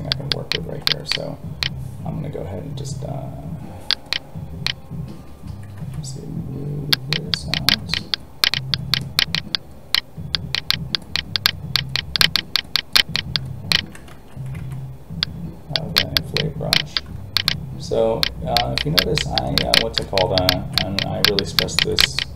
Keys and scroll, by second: 5.8 alt+a, 14.1 ctrl+z, 14.6 alt+a.